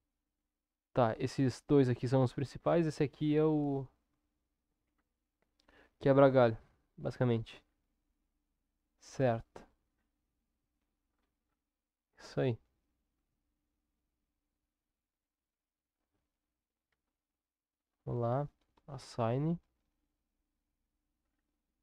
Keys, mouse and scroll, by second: 2.7 click, 16.9 Tab, 18.0 click.